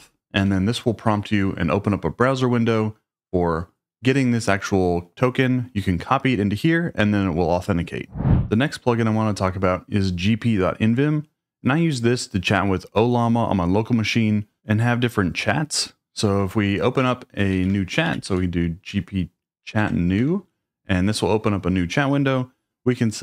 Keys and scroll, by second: 0.0-0.4 typing, 17.5 shift+;, 18.1 shift+g, 19.7 Tab, 19.8 Tab, 20.0-20.7 typing.